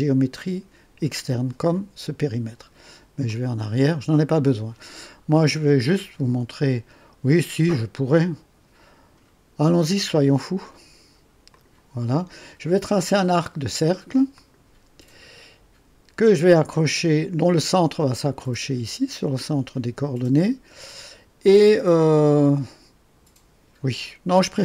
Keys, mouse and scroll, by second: 0.3 click, 3.2 click, 11.5 click, 14.3 click, 18.3 click.